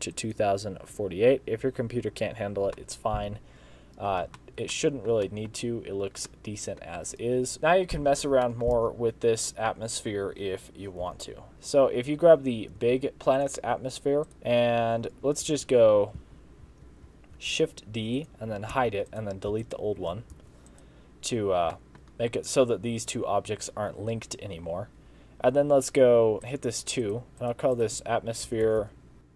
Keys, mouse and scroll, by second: 1.7 click, 2.8 middle click, 4.4 shift+middle click, 4.8 middle click, 5.3 shift+middle click, 5.7 scroll up 2, 6.3 middle click, 7.5 click, 7.5 KP_0, 8.2 scroll down 5, 8.6 shift+middle click, 8.8 scroll up 2, 11.1 Home, 11.5 shift+middle click, 12.1-12.6 scroll down 2, 12.9 g, 14.3 click, 15.3 z, 16.2 z, 16.7 z, 17.4 shift+d, 18.8 h, 19.1 click, 19.5 x, 20.4 alt+h, 20.7 click, 21.3 scroll up 1, 21.8 shift+middle click, 26.4 click, 27.1 click, 28.7 BackSpace, 28.9 BackSpace.